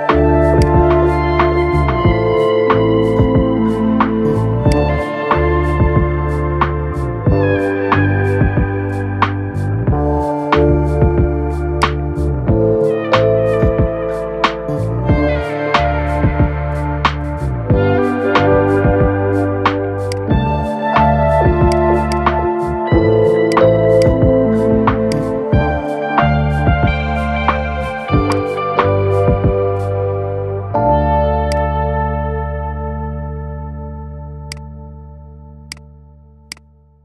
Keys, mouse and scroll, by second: 1.1-4.0 shift+middle drag, 4.4 click, 4.8 scroll up 3, 5.5-6.0 shift+middle drag, 6.0 scroll up 2, 6.6-7.1 shift+middle drag, 7.6-9.2 shift+middle drag, 9.2 scroll up 2, 9.8 Tab, 11.6 click, 12.7-13.5 ctrl+KP_Add, 15.7-17.9 middle drag, 17.9 ctrl+KP_Add, 19.8 click, 21.8-26.3 drag, 26.3 scroll down 4, 27.0 Tab, 27.6 scroll down 2, 28.0 click, 28.4 scroll down 3, 29.1-30.6 shift+middle drag, 30.6-30.9 scroll up 3, 31.2 click, 32.0 scroll up 1, 32.5 g, 35.4-36.7 drag, 36.7 scroll down 5.